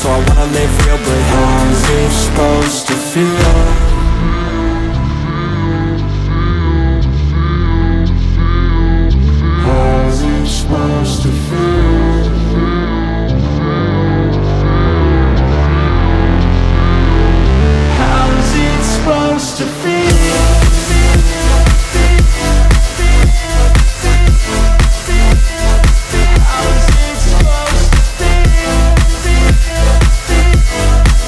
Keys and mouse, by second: 1.8-3.5 middle drag, 2.9 shift+d, 3.5-14.4 drag, 12.4 shift+a, 14.0 s, 14.4-17.7 middle drag, 14.6 s, 16.1 s, 16.7 s, 17.7-19.1 drag, 18.6 s, 19.1 middle click, 19.4 s, 20.0-21.1 drag, 21.1-22.1 middle drag, 22.1-23.9 drag, 23.5 s, 23.9-26.9 middle drag, 24.0 s, 26.1 s, 26.9-31.2 drag.